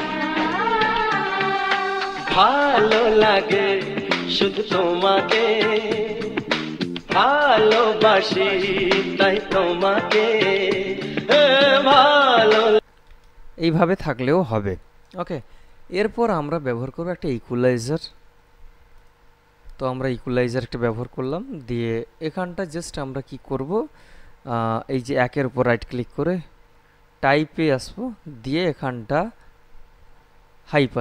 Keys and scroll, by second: 12.9 space.